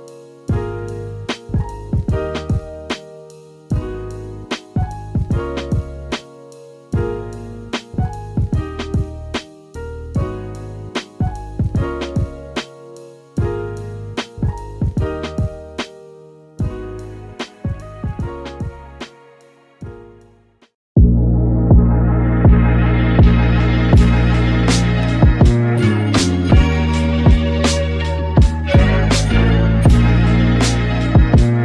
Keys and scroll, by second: 0.9 super+], 4.2 super+[, 18.1 super+z, 19.0 super+z, 19.6 shift+super+z, 20.0 shift+super+z.